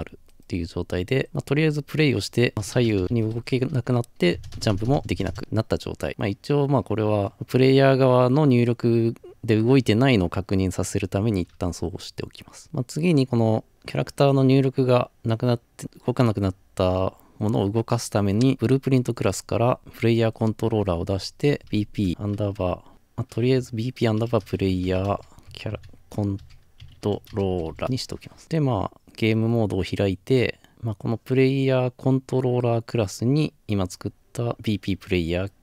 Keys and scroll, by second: 2.5-4.3 typing, 24.9-25.7 typing, 27.8 Return, 27.8 typing.